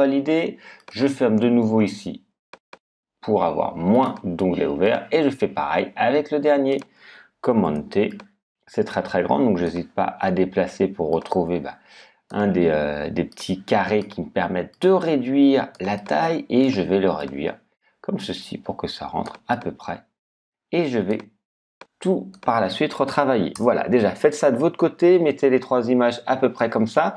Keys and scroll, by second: 23.5 Return.